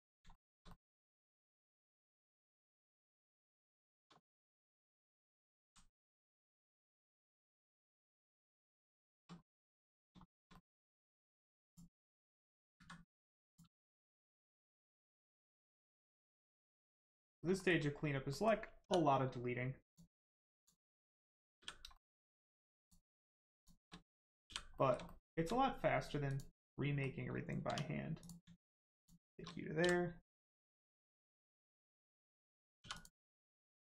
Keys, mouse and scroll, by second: 0.3 shift+middle click, 0.7 middle click, 0.7 middle click, 1.0 shift+middle click, 1.3 scroll down 1, 1.7 middle click, 3.8 shift+middle click, 4.2 middle click, 4.3 middle click, 5.1 click, 5.6 x, 6.1 click, 6.5 middle click, 8.3 click, 9.4 middle click, 10.2 shift+middle click, 10.5 middle click, 10.5 middle click, 11.7 shift+click, 12.7 x, 13.5 click, 13.9 shift+middle click, 14.4 middle click, 14.7 shift+middle click, 15.2 middle click, 15.3 middle click, 15.9 shift+middle click, 16.3 scroll down 1, 16.6 middle click, 17.6 shift+middle click, 17.8 scroll up 1, 18.3 middle click, 19.8 click, 20.5 shift+click, 21.0 middle click, 21.1 middle click, 21.6 f, 21.9 middle click, 23.5 shift+click, 24.4 click, 24.7 middle click, 25.0 shift+middle click, 26.2 middle click, 26.3 click, 26.6 middle click, 27.6 1, 28.2 click, 29.0 shift+click, 29.8 m, 30.5 click, 31.2 middle click, 31.6 shift+middle click, 32.8 middle click, 32.9 click, 33.6 shift+click.